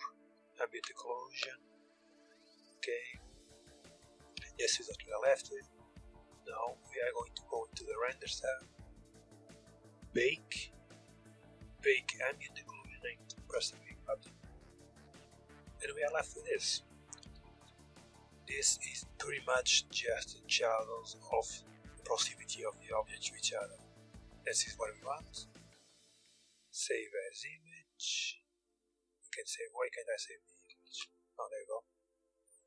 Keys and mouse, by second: 6.7-12.4 drag, 13.1-16.1 drag, 17.0 Tab, 17.7 middle click, 19.3-20.6 middle drag, 23.3-25.2 middle drag, 25.2-28.5 drag, 30.5 Tab, 31.4-32.6 drag.